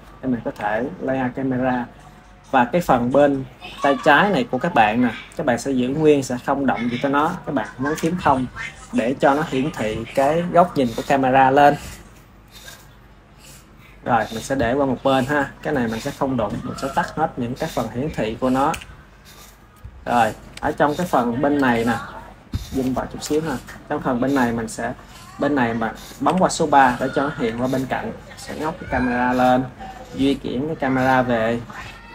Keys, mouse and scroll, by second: 0.5 KP_3, 7.8 KP_0, 14.8-17.4 drag, 18.5 t, 19.7-20.8 middle drag, 20.8 KP_0, 21.8-23.1 middle drag, 23.1 KP_0, 24.1 KP_3, 26.1 KP_3, 26.6 KP_3, 27.3 r, 27.4 r, 30.0 click.